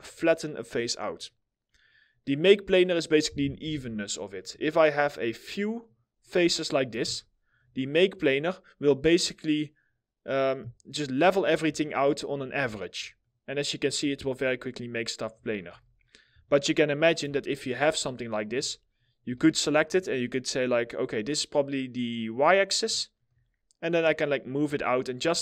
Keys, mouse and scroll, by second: 1.2 scroll, 1.3 scroll down 1, 1.6 middle click, 2.8-3.2 scroll up 1, 3.2 4, 4.3 ctrl+click, 6.8 alt+middle click, 7.4-9.4 scroll up 1, 11.4 alt+middle click, 12.8 alt+middle click, 14.2 alt+middle click, 15.3 ctrl+z, 15.6 middle click, 17.1 ctrl+click, 17.8 ctrl+click, 17.8 alt+middle click, 18.5 ctrl+click, 19.1 alt+middle click, 24.9 scroll, 25.0 scroll down 1, 25.2 alt+middle click.